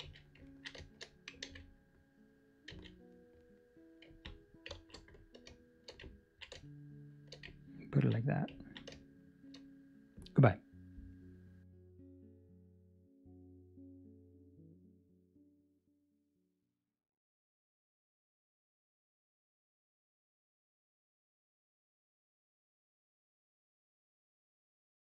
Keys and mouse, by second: 0.3 a, 0.4 ctrl+middle click, 0.7 shift+middle click, 1.4 a, 2.7 z, 3.5 middle click, 4.0 ctrl+middle click, 4.7 ctrl+space, 5.4 shift+middle click, 6.3 ctrl+middle click, 6.5 shift+middle click, 7.9 ctrl+middle click, 8.5 ctrl+middle click, 9.5 shift+middle click, 9.9 shift+middle click, 20.6 ctrl+alt+KP_1.